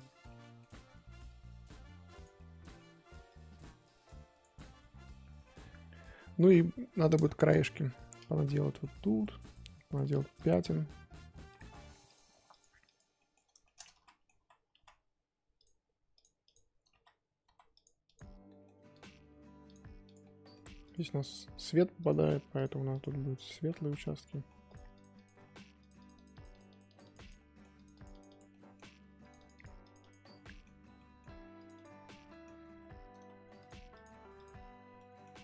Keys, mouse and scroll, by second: 0.3 middle click, 0.6-1.2 scroll up 1, 1.2-2.3 drag, 2.3 middle click, 3.2-4.6 drag, 4.6-5.2 scroll down 13, 5.2 middle click, 5.5-6.1 scroll up 1, 6.1-6.9 scroll up 5, 6.9-7.7 scroll up 3, 7.0 middle click, 7.7-9.5 middle drag, 9.5 click, 9.8 f, 10.3-11.5 drag, 12.0-13.1 drag, 13.1 middle click, 13.9 ctrl+z, 14.0 middle click, 14.3 ctrl+z, 14.7 ctrl+z, 16.1 click, 16.9 ctrl+z, 17.4 ctrl+z, 17.7 click, 18.4 middle click, 18.9-20.2 drag, 20.2 middle click, 20.8 click, 21.2 middle click, 22.0-23.1 drag, 23.1-24.6 middle drag, 24.6 click, 25.4 middle click, 25.8-27.3 drag, 27.3 middle click, 27.7 click, 28.5 middle click, 29.2-30.3 drag, 30.3-31.5 middle drag, 31.5 click, 32.3 middle click, 32.5 scroll up 2, 32.6 ctrl+z, 33.1 ctrl+z, 33.5-35.0 drag, 35.0 middle click.